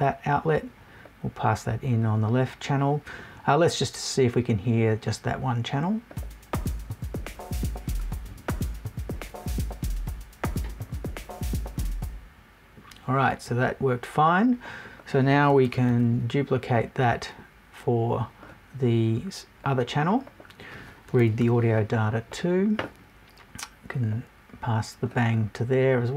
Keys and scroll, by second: 21.1 BackSpace.